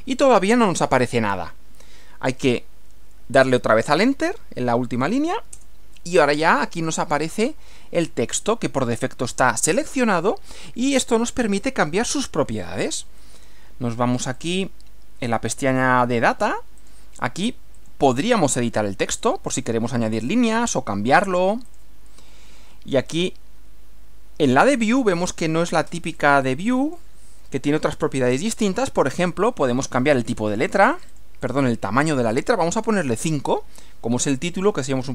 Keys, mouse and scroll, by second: 5.5 Return, 7.7 scroll up 2, 14.3 click, 16.8 click, 17.7 click, 19.3 click, 20.2 click, 21.7 click, 23.1 click, 26.2 click, 30.0 click, 30.5 click, 31.0 click, 33.3 5.